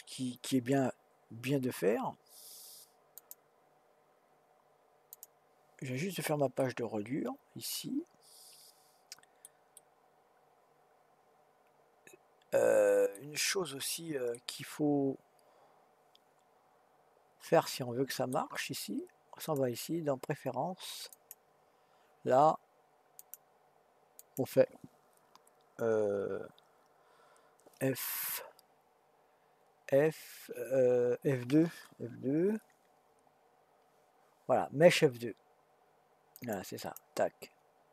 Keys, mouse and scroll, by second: 3.1 click, 5.1 click, 6.6-12.9 middle drag, 13.6-14.3 scroll up 1, 14.3-17.5 middle drag, 19.4-22.6 drag.